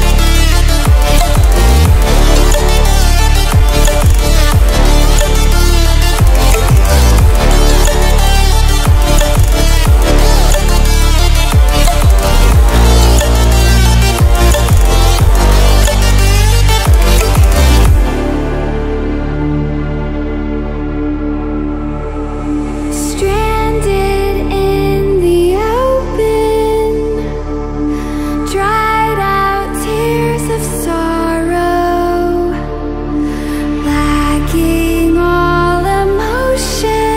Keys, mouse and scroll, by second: 4.0 right click, 6.0 click, 9.4 ctrl+alt+scroll up 1, 10.5-11.0 alt+shift+click, 11.6 ctrl+alt+scroll down 1, 13.0-14.9 drag, 18.3 ctrl+alt+scroll up 1, 19.3 ctrl+alt+scroll down 1, 20.4-23.5 drag, 23.8 ctrl+alt+scroll up 1, 24.9 alt+shift+click, 25.0-25.8 alt+shift+drag, 30.9-31.6 ctrl+alt+scroll down 2, 32.1 ctrl+alt+scroll down 1, 33.2 ctrl+alt+scroll up 1, 33.8 ctrl+alt+scroll up 1, 34.5-36.2 drag, 36.2-37.1 shift+drag.